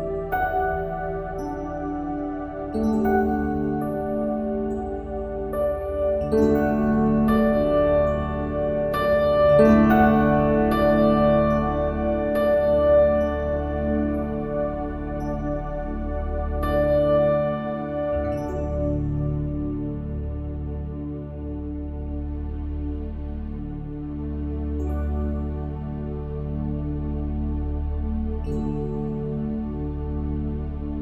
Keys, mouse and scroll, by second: 0.1 ctrl+z, 0.4 Tab, 0.9 ctrl+r, 1.5 middle click, 2.2 click, 2.4 e, 3.2 middle click, 3.9-5.1 drag, 4.7 middle click, 5.1 e, 6.4 ctrl+b, 7.5 ctrl+r, 8.3-9.4 middle drag, 9.4 ctrl+b, 11.6 click, 12.2 s, 12.9 middle click, 13.6 click, 13.9 ctrl+b, 15.3 middle click, 16.1 scroll up 1, 16.3 middle click, 16.9 middle click, 17.6-18.7 drag, 18.4 ctrl+r, 18.8 s, 19.4 ctrl+b, 21.0 ctrl+r, 22.1 ctrl+r, 23.0 ctrl+z, 23.1 ctrl+r, 24.1 middle click, 24.7 shift+a, 25.2 s, 25.9 click, 26.9 middle click, 27.2 click, 27.8 KP_7, 28.3 click, 29.1 click, 29.9 KP_1, 30.4 s.